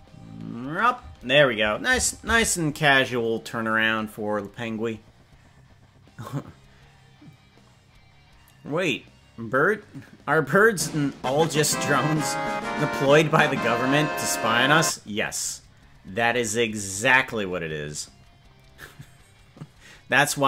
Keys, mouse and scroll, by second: 1.1 space, 3.7 ctrl+s.